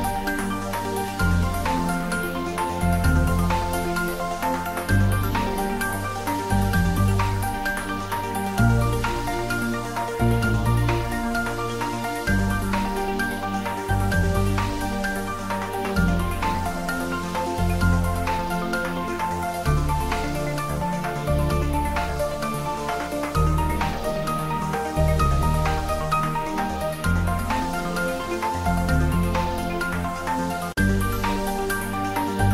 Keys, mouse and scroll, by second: 0.8 shift+middle click, 1.6 ctrl+middle click, 2.4 click, 3.0 g, 3.9 y, 4.3 x, 5.1 click, 6.0 click, 7.5 shift+a, 10.3 click, 11.0 s, 12.2 click, 13.0 s, 14.0 click, 16.4 g, 17.4 click, 17.5 s, 18.8 click, 20.5-22.9 typing, 21.7 click, 23.5 click, 24.2-25.0 typing, 25.5 click, 26.1 middle click, 27.2 click, 28.6 shift+middle click, 29.4 ctrl+middle click, 30.0-31.7 typing, 31.0 shift+click.